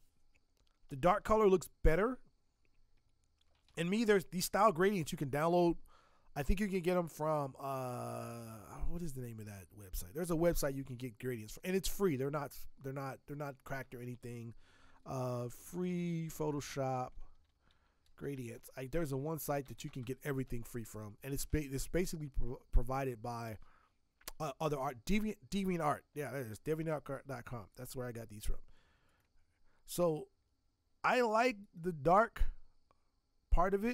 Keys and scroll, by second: 15.1-20.3 typing.